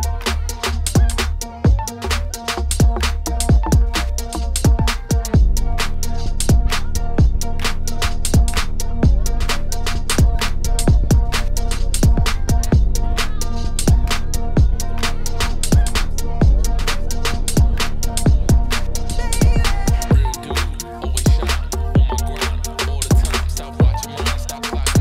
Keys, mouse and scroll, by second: 1.8 Tab, 2.0 click, 2.1 Tab, 2.3 click, 2.5 ctrl+s, 2.6 scroll down 2, 2.8-5.1 middle drag, 5.1-5.6 scroll up 1, 5.6 ctrl+s, 6.9 shift+right click, 7.7 scroll up 1, 7.8 shift+a, 9.2 s, 10.1 KP_Decimal, 10.3-10.6 scroll down 1, 10.6 middle click, 10.9 f.